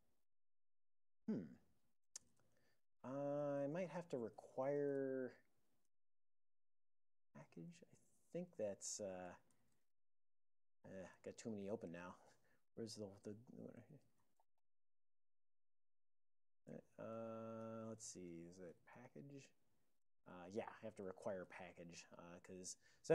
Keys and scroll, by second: 2.5 super+j, 3.4 ctrl+p, 3.5 ctrl+p, 3.9-8.2 typing, 9.4 super+j, 9.9 ctrl+x, 10.5-11.3 typing, 11.3 ctrl+g, 12.4 super+j, 14.0-14.5 super+j, 15.1 ctrl+x, 15.1-15.9 typing, 16.4 ctrl+g, 17.5-21.0 typing.